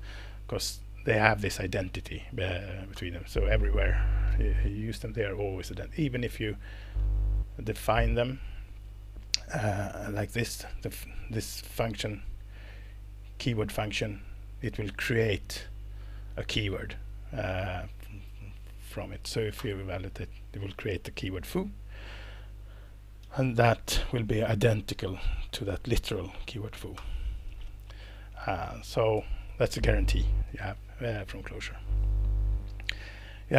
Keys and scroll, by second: 2.9 alt+Return, 8.9 Right, 9.1 Right, 9.2 Right, 9.3 Right, 9.5 Right, 9.7 Right, 18.8 ctrl+Page_Up, 19.6 ctrl+Return, 23.7 Escape, 26.9 alt+Return, 27.5 Escape, 28.4 Down, 28.7 Up, 29.1 Down, 29.5 Up.